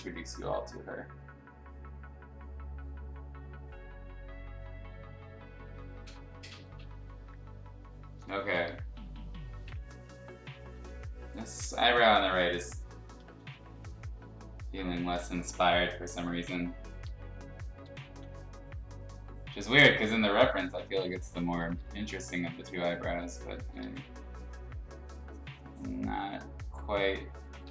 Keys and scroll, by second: 8.1 space, 10.7 x, 11.6 x, 12.3 ctrl+z, 13.4 ctrl+z, 16.9 ], 17.1 ], 18.0 x, 20.4 x, 21.5 [, 21.7 [, 21.9 [, 22.2 ], 23.6 ctrl+z, 23.8 x, 26.1 x, 27.6 ctrl+z.